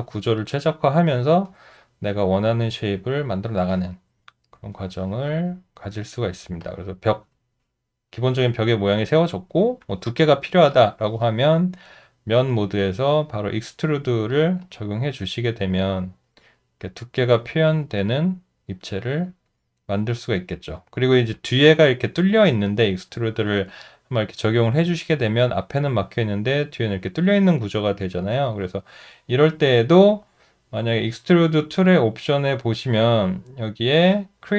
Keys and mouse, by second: 6.6 alt+click, 17.7 alt+click, 23.7 alt+click.